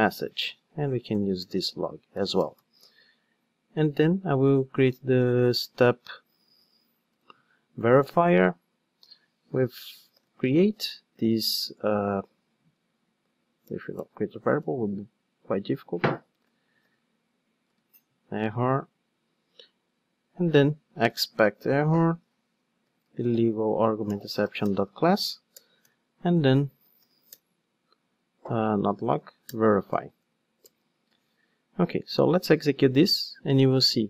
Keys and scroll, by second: 8.0 Return, 10.0 Return, 13.6 alt+Return, 17.8 super+c, 21.2 Return, 32.4 ctrl+shift+d.